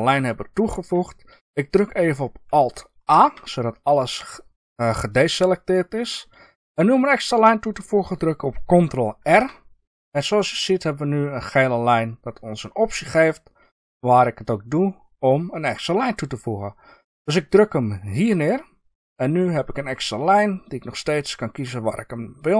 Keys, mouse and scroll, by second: 3.1 alt+a, 7.3-13.2 middle drag, 9.2 ctrl+r.